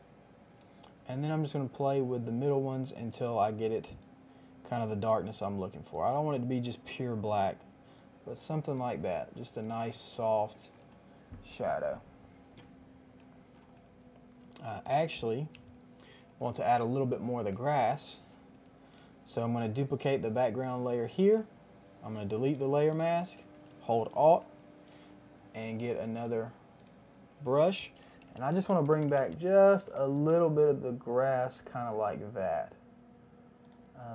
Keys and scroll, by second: 17.8 ctrl+j, 28.1-29.9 typing.